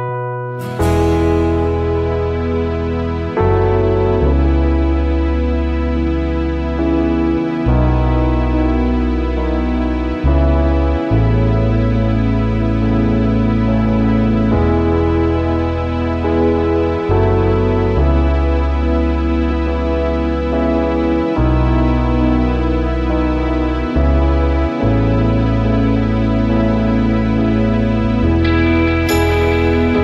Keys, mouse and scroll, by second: 23.4 shift+click.